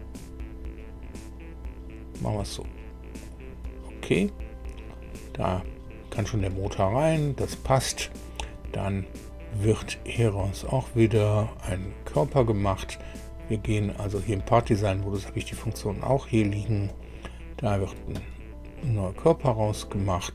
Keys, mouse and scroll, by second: 3.2 click, 10.5 click, 16.8 click, 18.5-19.3 scroll down 2.